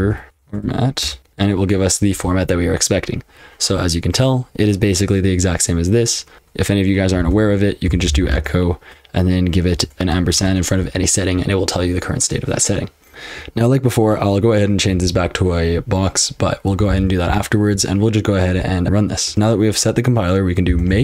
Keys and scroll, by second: 0.0-0.8 typing, 1.0 Return, 7.2-8.7 typing, 9.7-10.3 typing, 13.1 ctrl+[, 14.9 b, 16.9 ctrl+n, 17.3 ctrl+n, 19.3 :, 20.4-21.0 typing.